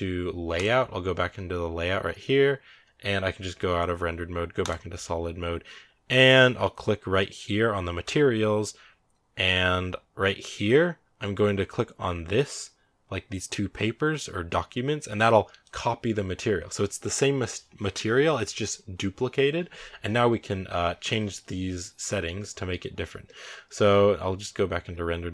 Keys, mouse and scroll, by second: 0.0-0.5 right drag, 0.5 click, 4.5 click, 15.6-24.8 drag, 24.8 z.